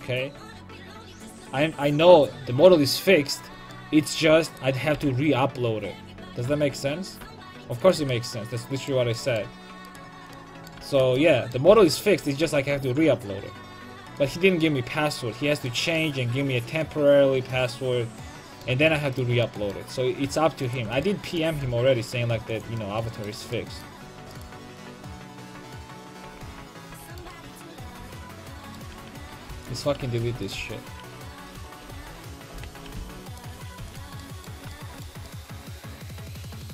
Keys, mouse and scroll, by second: 4.5 right click, 4.9 g, 8.1-9.9 drag, 9.9-11.7 right drag, 11.7 g, 14.2-16.0 drag, 14.2 a, 19.1-21.5 right drag, 21.5 g, 22.6-24.0 drag, 24.0 Tab, 24.3 click, 24.6-25.9 right drag, 25.3 Tab, 26.1 click, 26.1 right click, 26.6 alt+h, 27.2-33.0 typing, 30.5-32.5 right drag, 33.6-35.6 drag, 35.6 middle click, 35.9 middle click.